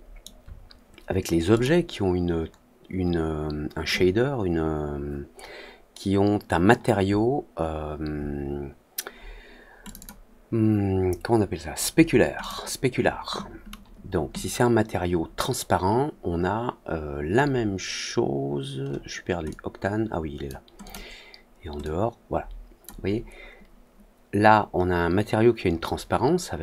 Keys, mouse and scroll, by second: 1.4 click, 9.8 click, 9.9 click, 12.3 click, 19.4-20.4 drag, 20.8 click, 21.7-22.8 drag.